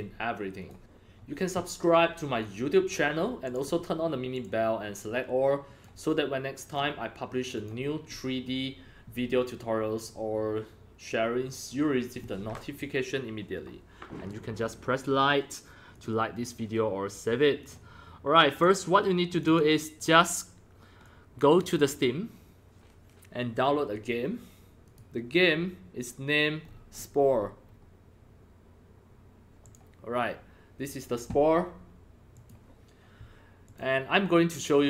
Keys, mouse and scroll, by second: 0.6 click, 3.4 click, 4.3 click, 5.0-5.8 drag, 6.6 click, 7.5 click, 15.9 click, 17.5 click, 18.5 click, 19.2 click, 19.4 click, 21.0-21.5 drag, 24.8 click, 26.6 scroll down 3, 26.7 scroll up 4, 26.9-28.2 scroll down 6, 29.6 click, 32.3 click, 33.6 click.